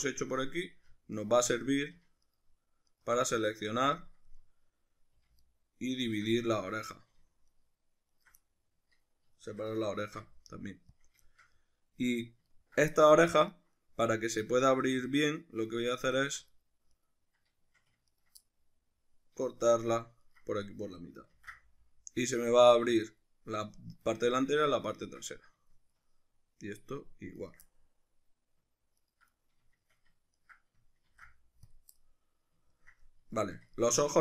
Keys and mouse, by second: 0.0-1.2 middle drag, 1.2 alt+shift+right click, 1.5 middle click, 2.3 alt+shift+right click, 2.9 alt+shift+right click, 3.3-5.4 middle drag, 5.4 alt+shift+right click, 6.0 alt+shift+right click, 6.3-7.5 middle drag, 7.5 alt+shift+right click, 8.1 alt+shift+right click, 8.4-16.1 middle drag, 10.0 ctrl+e, 16.1 alt+right click, 16.9 right click, 18.1 ctrl+right click, 18.4-27.4 middle drag, 20.3 ctrl+right click, 21.3 ctrl+e, 27.4 right click, 27.7-29.0 middle drag, 29.0 ctrl+right click, 29.4-30.4 middle drag, 30.4 ctrl+right click, 31.1 ctrl+e, 32.0-34.2 middle drag.